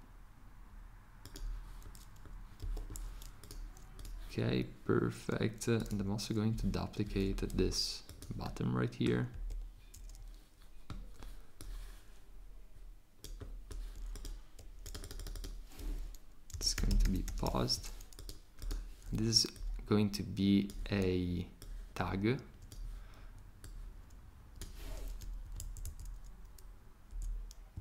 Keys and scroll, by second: 2.6 Escape, 7.0 c, 9.3 v, 16.3-17.9 typing.